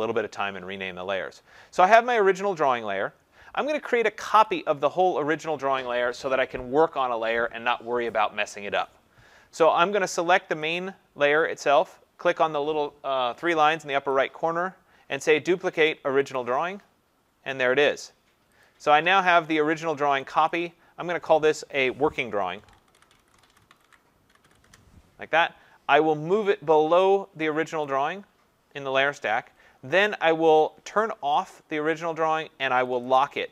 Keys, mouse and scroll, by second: 2.1 click, 4.5 click, 10.7 click, 14.1 click, 16.4 click, 18.7 click, 19.5 click, 20.3 click, 20.5 click, 22.3-24.9 typing, 27.9 click, 30.7 click, 31.5 click.